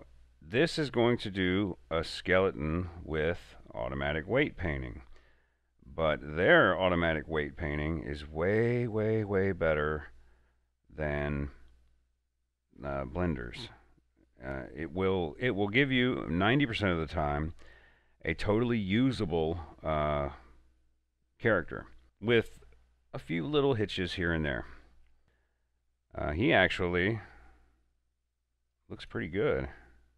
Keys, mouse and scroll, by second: 29.0 click, 29.5 scroll up 1.